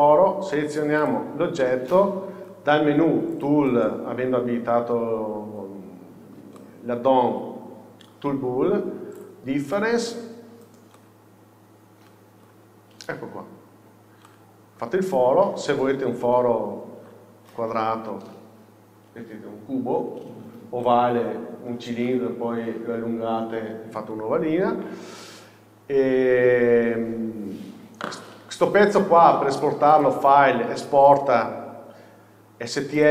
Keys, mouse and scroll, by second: 1.1 shift+click, 6.7-9.3 shift+middle drag, 9.3-11.0 drag, 10.5 scroll down 1, 11.0-13.0 middle drag, 13.8 Tab, 13.8-15.0 middle drag, 16.3 KP_7, 17.5 shift+middle click, 20.3 scroll down 1, 20.9 middle click, 26.0-33.1 middle drag, 27.4-33.1 scroll down 1.